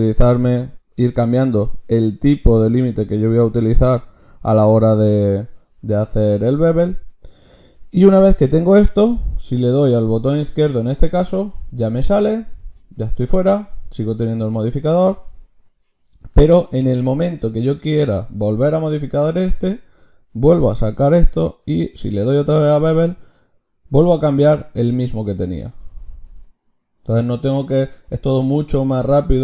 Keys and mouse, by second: 7.6-20.5 drag, 20.5 ctrl+shift+q.